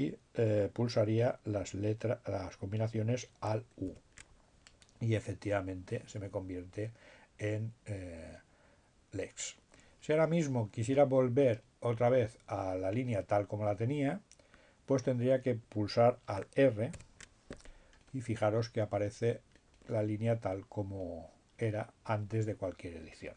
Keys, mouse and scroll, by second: 2.6 alt+u, 15.2 alt+r.